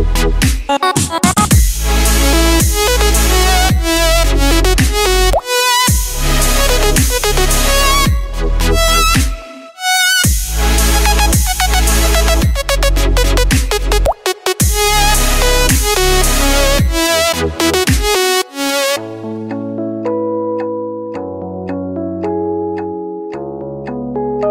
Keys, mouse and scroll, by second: 0.8 super+z, 7.9 super+z, 8.9 super+z, 9.0 click, 9.0 typing, 20.8 super+z, 21.3 super+z.